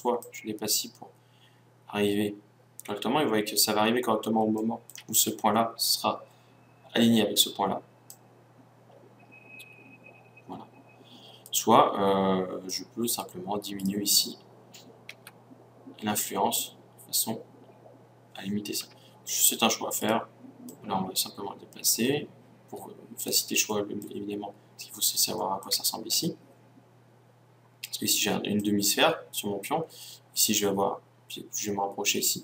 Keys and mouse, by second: 0.2 click, 1.8 click, 3.9-8.1 middle drag, 8.1-9.9 drag, 12.8-15.8 drag, 13.8 right click, 15.2 g, 20.1 click, 20.7-21.9 middle drag, 21.9 click, 22.6 middle click, 23.2-25.2 drag, 25.2-28.6 middle drag, 28.6-30.6 drag.